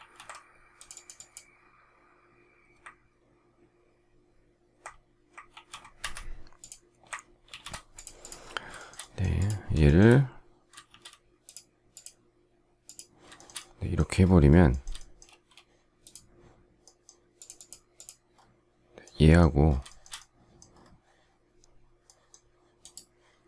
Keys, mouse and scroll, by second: 5.4 ctrl+g, 5.9 Escape, 7.4 ctrl+shift+g, 8.7 shift+middle click, 9.8 shift+middle click, 10.8 shift+x, 13.3 shift+middle click, 13.4 shift+double middle click, 14.6 shift+middle click, 15.2 space, 19.8 shift+middle click.